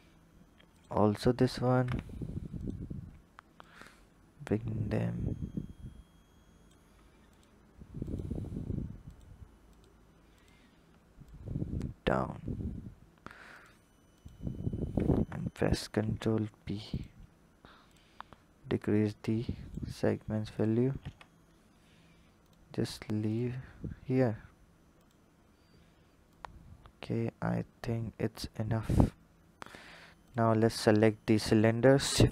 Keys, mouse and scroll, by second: 0.4 alt+shift+click, 1.4 ctrl+z, 2.3 alt+shift+click, 3.5 click, 7.0 alt+click, 7.9 alt+click, 8.9 alt+click, 9.5 alt+click, 10.2 alt+click, 11.0 click, 13.3 alt+click, 13.9 alt+click, 15.6 ctrl+b, 17.7-20.9 drag, 20.9 Tab, 21.3-22.1 scroll down 3, 22.3 click, 23.1 click, 24.8 click, 26.1 click, 28.0 scroll up 1, 30.1 click, 30.7 click, 31.8 shift+s.